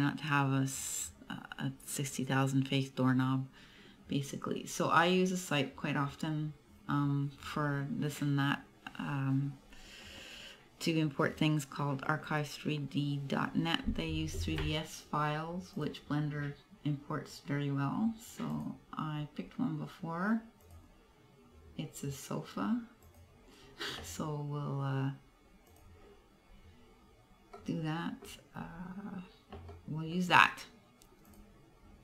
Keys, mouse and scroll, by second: 15.8 click, 26.6 click, 27.6 middle click, 28.4-29.0 scroll up 4, 29.8 middle click, 31.3 click.